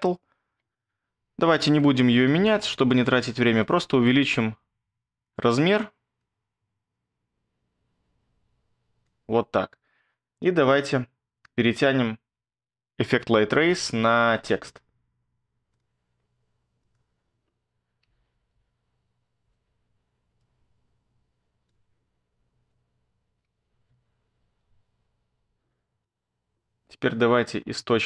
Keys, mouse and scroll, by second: 17.8-19.0 typing, 24.1 ctrl+scroll, 24.9-28.0 scroll.